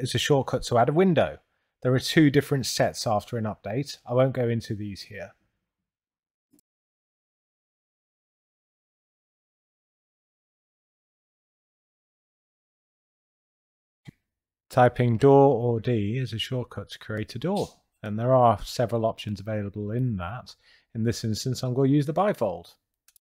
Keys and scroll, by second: 6.0 Return, 8.4 2, 9.3 Return, 10.9 t, 11.4 Return, 13.8 6, 14.4 Return, 16.0 d, 16.4 Return, 20.3 Return, 22.3 2, 23.1 Return.